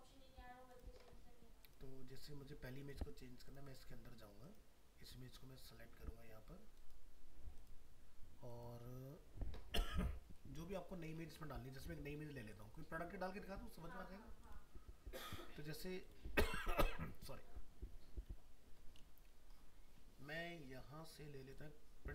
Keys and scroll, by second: 11.1 alt+Tab.